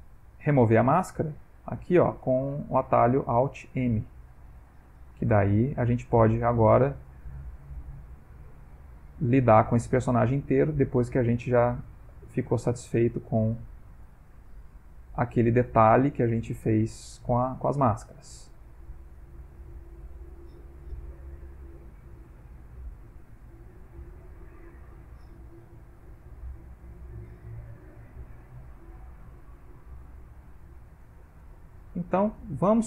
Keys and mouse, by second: 4.9 middle click, 5.3 ctrl+middle click, 6.4 shift+click, 7.0 shift+click, 10.4 middle click, 11.2 shift+click, 12.1 middle click, 12.6 shift+click, 13.6 middle click, 14.1 shift+click, 15.1 middle click, 15.9 shift+click, 16.6 middle click, 17.1 shift+click, 18.2 middle click, 18.6 ctrl+middle click, 19.0 middle click, 19.7 ctrl+click, 21.0 ctrl+z, 22.1 middle click, 22.8 g, 23.1 click, 24.1 click, 27.2 ctrl+z, 27.6 shift+s, 28.0 click, 28.9 middle click, 29.4 ctrl+middle click, 30.5 click, 31.9 click, 32.5 ctrl+middle click.